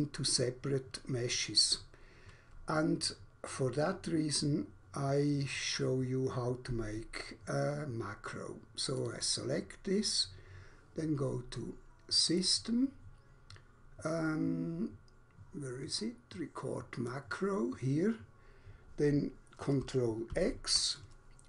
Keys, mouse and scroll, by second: 8.6 click, 9.1 click, 9.2 double click, 12.2 click, 16.7 click, 20.2 ctrl+x.